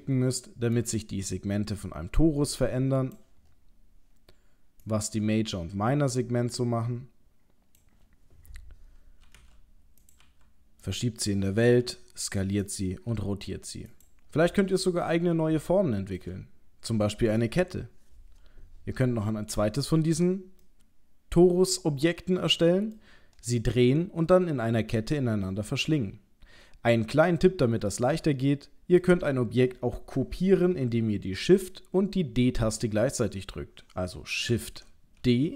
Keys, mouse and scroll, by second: 0.7 click, 3.4 scroll up 5, 4.8 click, 8.6-9.2 scroll down 4, 9.2 g, 10.2 g, 11.8 s, 13.1 r, 14.3-14.7 scroll down 4, 15.7 shift+middle click, 17.3 scroll up 1, 20.6 middle click, 22.9-23.6 scroll up 1, 27.9 middle click.